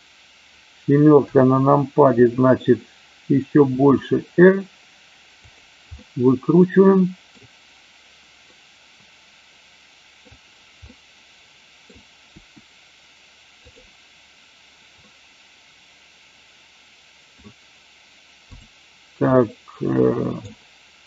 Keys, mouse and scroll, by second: 3.7 r, 5.3 click, 5.8-7.3 middle drag, 8.4-10.2 middle drag, 10.8-11.8 middle drag, 12.3 r, 15.1-17.3 middle drag, 19.3-20.3 middle drag.